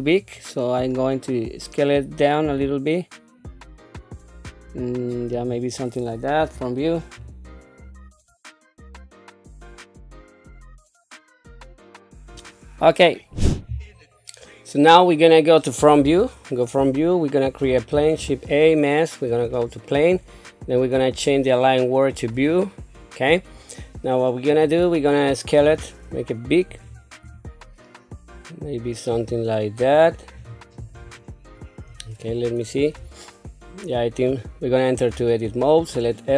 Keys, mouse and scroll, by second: 0.2-0.8 scroll up 2, 1.3-1.7 scroll down 1, 3.0 s, 6.4 KP_1, 7.2-8.0 scroll up 3, 8.3 shift+middle click, 8.5 click, 8.9 scroll down 1, 9.1 s, 9.7 click, 10.3 click, 10.3 KP_7, 10.9 click, 11.2 middle click, 11.4 click, 11.6 click, 14.9 middle click, 15.8 middle click, 16.0 KP_1, 17.9 shift+a, 19.4 shift+a, 21.1-22.6 drag, 24.4 click, 25.6 s, 27.2 s, 30.9-31.8 scroll down 2, 31.8 scroll up 1, 35.2 Tab.